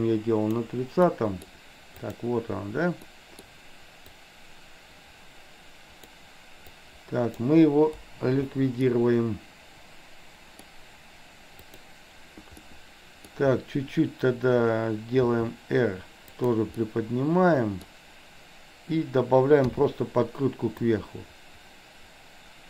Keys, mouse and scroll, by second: 1.1-1.5 middle drag, 2.1 click, 3.1-3.5 middle drag, 4.2-6.2 drag, 6.7-7.5 drag, 8.0 Delete, 9.0-10.6 middle drag, 11.6 click, 12.6 middle click, 15.2 r, 16.8-17.8 middle drag, 19.7 i, 20.8-22.6 drag.